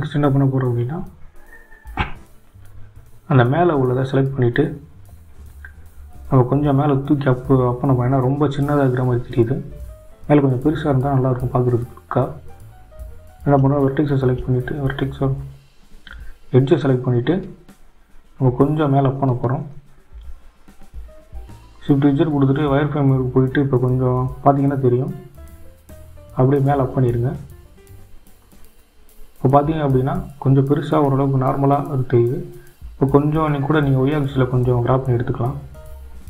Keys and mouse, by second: 6.4 Tab, 7.9 click, 8.5 Tab, 16.3 shift+z, 18.6-19.9 drag, 21.7-23.4 drag, 26.8 g, 34.0 shift+z.